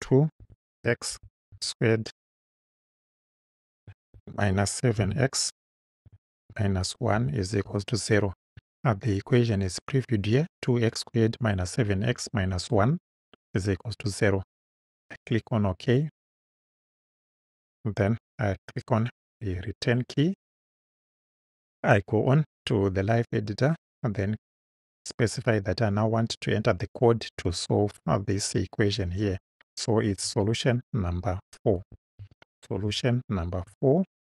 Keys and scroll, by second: 0.0-2.3 typing, 3.8 -, 4.2 7, 5.0 x, 6.5 1, 7.2 =, 7.7 0, 19.4 Return, 30.3 s, 31.8 BackSpace, 32.8 shift+s, 33.7 shift+4.